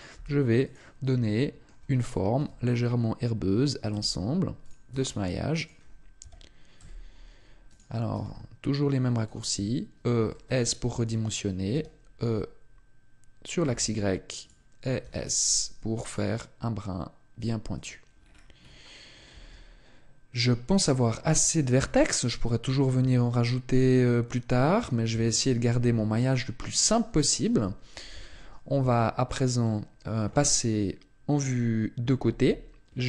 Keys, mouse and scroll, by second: 0.1 s, 0.7 click, 1.2 shift+middle click, 2.4 e, 4.7 click, 4.9 s, 5.6 click, 6.2 e, 7.8 click, 8.1 s, 9.2 click, 10.3 shift+middle click, 12.1 e, 14.4 click, 15.0 s, 17.8 click, 18.1-18.6 scroll down 1, 18.6-19.3 scroll up 5, 19.3 Tab, 20.8 scroll down 1, 21.2 Tab, 22.9 ctrl+r, 28.8 Tab, 32.2 KP_3.